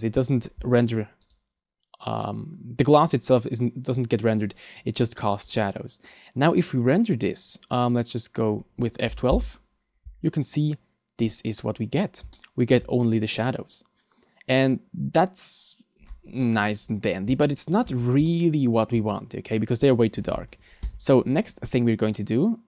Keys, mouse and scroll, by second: 1.2 right click, 2.2 right click, 5.6 middle click, 6.2-6.8 scroll down 3, 6.6 middle click, 20.8 Escape, 20.8 scroll up 1, 21.7-22.4 scroll down 3, 22.2 middle click.